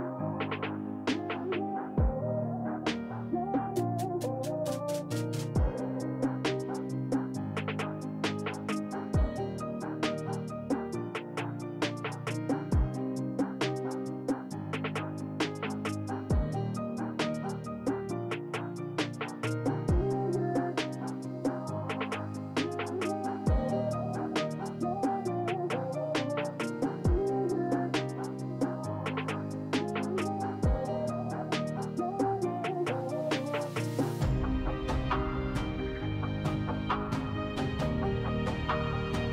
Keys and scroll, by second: 13.1 s.